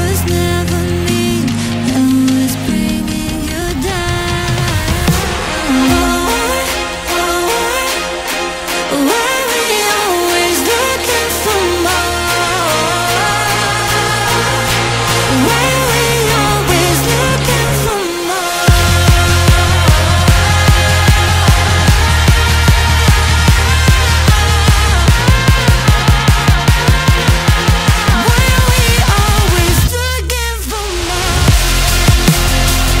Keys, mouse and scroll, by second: 0.6-1.2 scroll up 6, 1.2-2.2 middle drag, 2.2 scroll down 4, 2.7 click, 3.0-4.0 scroll down 4, 4.0-5.1 middle drag, 5.1-6.2 scroll down 1, 6.2 click, 7.0-9.6 drag, 9.6-10.2 scroll up 10, 11.7 click, 12.0-13.4 scroll down 11, 13.4-14.6 drag, 14.6-15.1 scroll up 10, 15.4-18.4 middle drag, 19.2-19.8 scroll down 8, 20.5 click, 20.9-22.0 scroll down 4, 22.0-23.8 drag, 23.8-24.3 scroll up 10, 24.5-26.0 middle drag, 26.0 Tab, 31.1 click, 31.6 click, 32.7-33.0 scroll up 4.